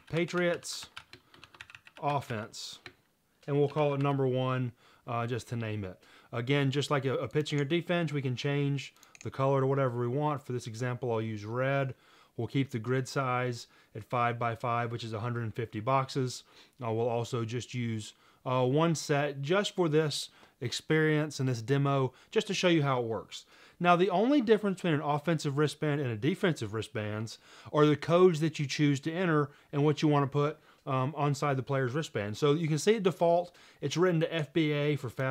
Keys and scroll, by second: 0.0-4.5 typing.